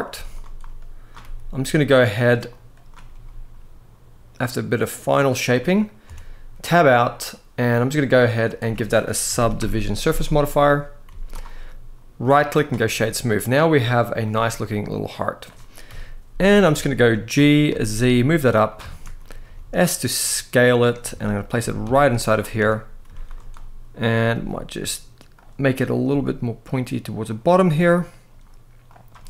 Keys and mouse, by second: 0.4 click, 0.9 g, 1.6 click, 2.4 click, 2.8 g, 5.8 Tab, 7.9-10.4 drag, 10.8 z, 12.0-12.4 right drag, 14.3-15.2 middle drag, 15.6 KP_1, 16.5-16.8 shift+middle drag, 17.1 g, 17.4 z, 18.6 shift+middle drag, 19.2 s, 20.4 click, 20.9 shift+middle click, 21.3 g, 21.6 z, 22.4 Tab, 22.8 z, 23.4 click, 24.1 g, 25.1 click, 25.5 click, 25.8 g, 27.0 click, 27.8 click, 28.6 drag, 29.0 g.